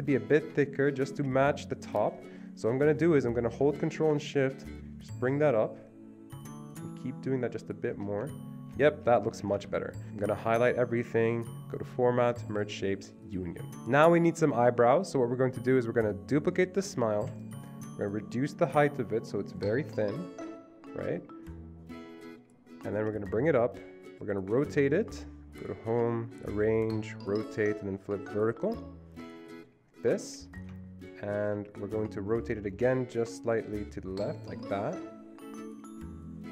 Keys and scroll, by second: 9.1 Escape, 9.3 Escape, 9.5 Escape, 9.6 Escape, 13.7 ctrl+z, 13.7 Delete, 17.2 ctrl+d.